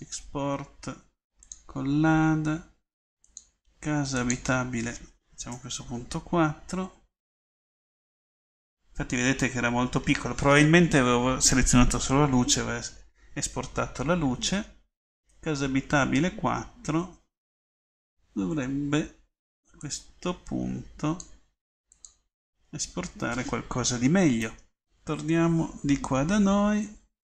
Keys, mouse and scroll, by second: 0.2-1.2 middle drag, 24.1 click.